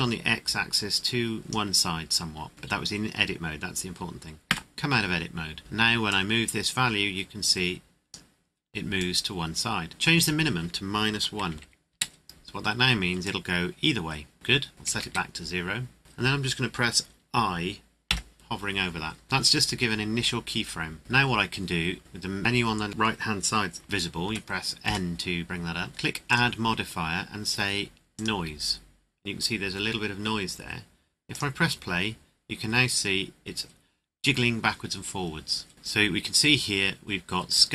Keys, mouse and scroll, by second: 4.5 Tab, 6.1 click, 11.1 KP_Subtract, 11.5 KP_1, 11.9 KP_Enter, 13.5 click, 14.9 KP_0, 15.0 KP_Enter, 18.1 i, 21.2 scroll down 1, 24.2 n, 24.8 n, 25.8 scroll down 1, 26.3 click, 31.3 click, 35.7 click.